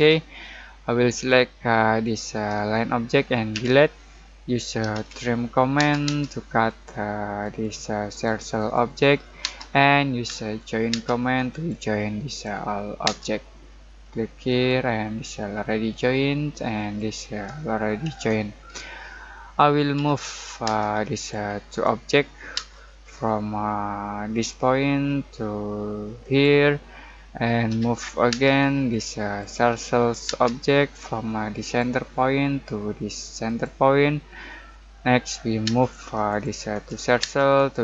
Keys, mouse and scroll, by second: 1.1 click, 3.5 Delete, 4.5-5.7 typing, 6.6 click, 10.2 j, 10.9 space, 11.5 click, 13.0 space, 14.4 click, 16.7 click, 18.1 Escape, 19.0 middle click, 19.9 m, 20.6 space, 21.1 click, 22.5 space, 24.3 click, 27.0 middle click, 27.6 m, 28.3 space, 28.9 click, 30.2 space, 31.6 click, 35.6 space, 36.2 click, 37.2 space, 37.5 click.